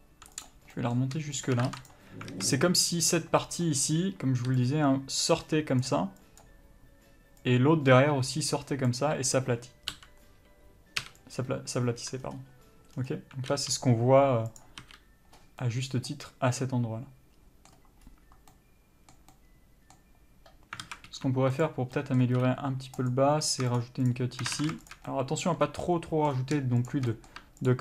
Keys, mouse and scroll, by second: 0.7 click, 1.0 middle click, 1.7 shift+click, 2.2 ctrl+e, 2.6 alt+a, 3.7 middle click, 4.9 click, 6.1 d, 6.5 click, 6.7 d, 7.7 click, 9.2 d, 10.2 l, 11.7 u, 13.2 scroll down 1, 13.8 n, 14.9 click, 15.1 n, 15.7 scroll up 1, 15.9 middle click, 18.3-18.9 scroll up 1, 18.9 middle click, 21.1 alt+a, 21.4 3, 21.8 click, 22.2 middle click, 22.7 2, 23.3 click, 24.1 shift+click, 24.9 ctrl+z, 25.2 shift+click, 25.4 middle click, 25.9 scroll up 1, 26.1 middle click, 27.2 shift+click, 27.4 middle click.